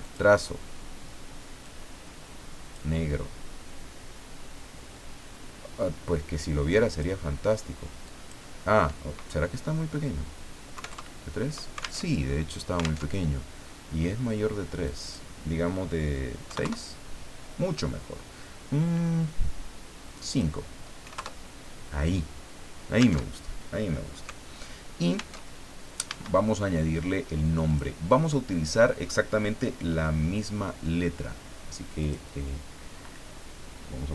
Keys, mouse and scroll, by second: 0.0 click, 1.6-2.9 drag, 6.9 click, 8.0 click, 10.7 KP_3, 10.9 KP_Enter, 12.0 alt+Tab, 13.0 alt+Tab, 13.9 scroll up 2, 14.8 click, 16.4 KP_6, 16.6 KP_Enter, 20.1 click, 21.0 KP_5, 21.1 KP_Enter, 23.2 alt+Tab, 25.4 alt+Tab, 26.1 Caps_Lock, 27.6 click, 32.0 click, 34.0-34.1 typing.